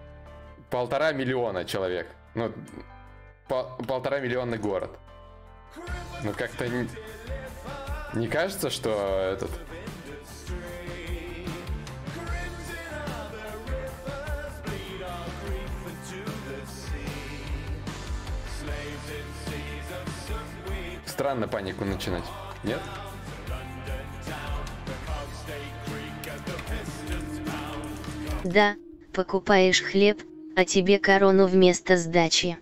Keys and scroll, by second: 15.7 alt+Tab, 16.7 alt+Tab, 18.1 alt+Tab, 23.3 shift+d, 23.7 shift+d, 24.1 shift+d.